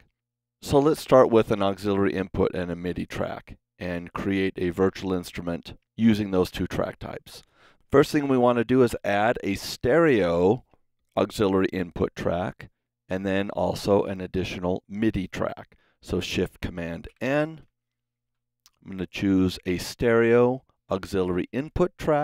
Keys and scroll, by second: 17.0 shift+super+n.